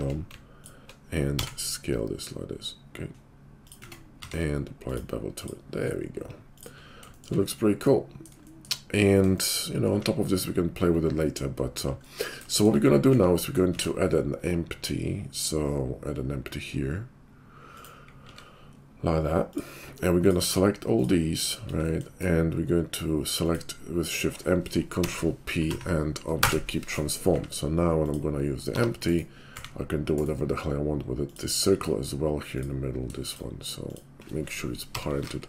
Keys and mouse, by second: 1.4 s, 3.8 Tab, 4.1 q, 5.6-20.1 middle drag, 13.2 `, 13.6 shift+a, 18.2 s, 20.1 click, 20.2-24.6 shift+middle drag, 25.0 ctrl+p, 27.3 `, 28.7 g, 29.5 s, 31.3 click, 32.5 click, 34.9 ctrl+p.